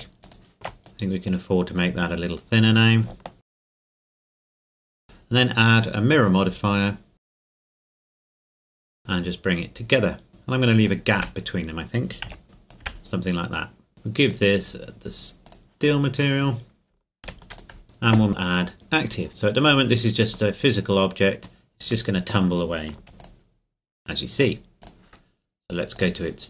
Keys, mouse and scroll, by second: 0.5 alt+shift+right click, 0.9 click, 3.4 alt+shift+right click, 3.6 middle click, 4.0 click, 4.4 ctrl+KP_Add, 4.6 click, 4.9 Tab, 5.0 click, 7.5 Tab, 8.0 click, 8.6 a, 8.7 a, 8.9 click, 11.2 Tab, 12.3 KP_1, 12.4 click, 12.8 Tab, 13.5 click, 16.0-16.7 scroll down 1, 17.2 ctrl+s, 17.5 ctrl+click, 17.8 middle click, 19.0 click, 19.6-20.5 scroll up 1, 20.5 middle click, 23.1 click.